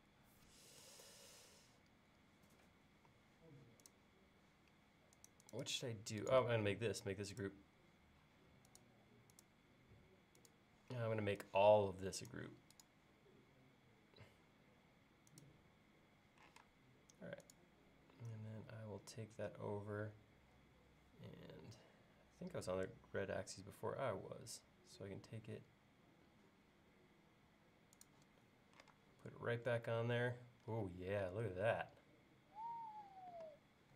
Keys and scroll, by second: 16.5 m, 28.9 space.